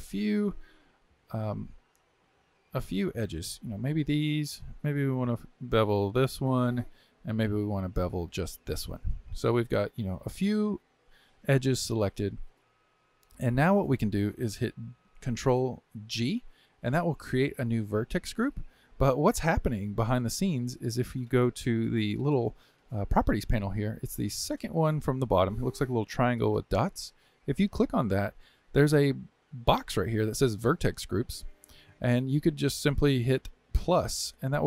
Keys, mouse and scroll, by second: 1.3 shift+click, 2.9 click, 3.7 shift+click, 4.4-6.4 middle drag, 6.4 shift+click, 7.0-8.4 middle drag, 8.4 shift+click, 8.9-12.0 middle drag, 12.5-15.7 shift+middle drag, 16.1 ctrl+g, 27.6 click, 29.9-34.3 drag.